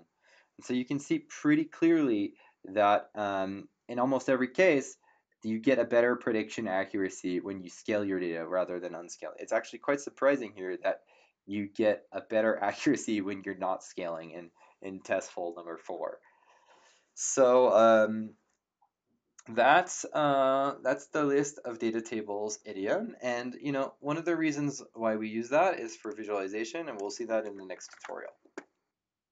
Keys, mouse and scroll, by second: 25.8 click, 27.9 alt+Tab.